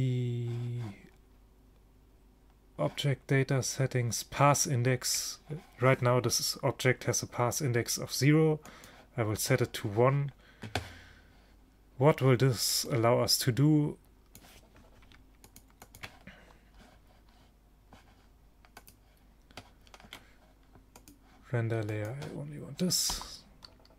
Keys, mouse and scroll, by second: 3.9-8.8 middle drag, 8.8-10.5 drag, 12.9-14.5 drag, 15.5-17.7 drag, 18.8-20.4 drag, 20.4 middle click, 21.1-22.3 drag.